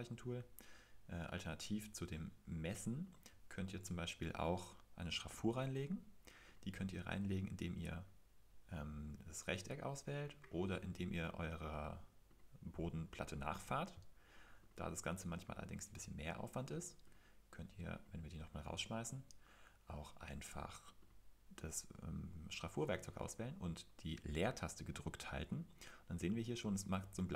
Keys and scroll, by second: 16.0 Escape, 17.6 Escape, 18.3 Escape, 18.9 super+z.